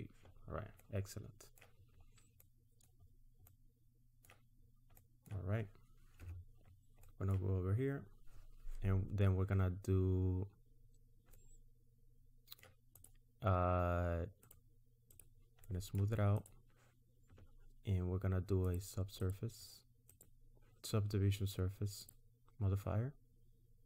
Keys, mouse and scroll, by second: 0.4-0.8 scroll down 2, 0.8 middle click, 1.9-2.4 scroll up 2, 2.4 middle click, 3.0 scroll up 2, 3.5 middle click, 4.6 scroll down 1, 5.0 middle click, 6.2 Tab, 6.7-7.2 scroll down 4, 7.0 middle click, 11.4 middle click, 13.0 click, 14.4 right click, 15.7 middle click, 16.4 click, 18.7 click, 19.2 click, 20.1 click.